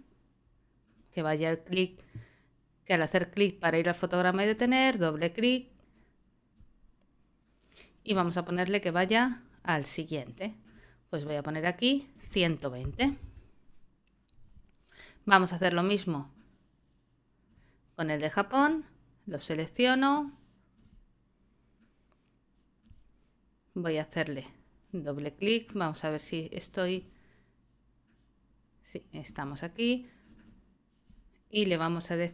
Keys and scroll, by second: 12.6-13.7 typing.